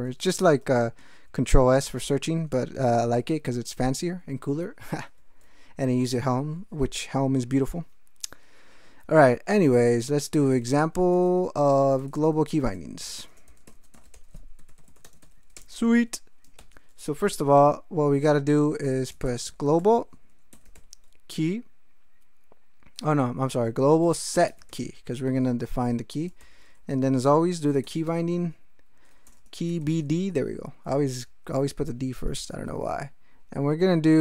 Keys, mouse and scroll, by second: 0.2 ctrl+n, 0.6 ctrl+BackSpace, 1.3 w, 2.0 ctrl+BackSpace, 2.6 ctrl+e, 2.9 ctrl+e, 3.0 ctrl+n, 5.0 ctrl+g, 9.5-16.6 typing, 18.9-21.2 typing, 23.1-26.4 typing, 27.6-31.1 typing, 32.5 shift+'.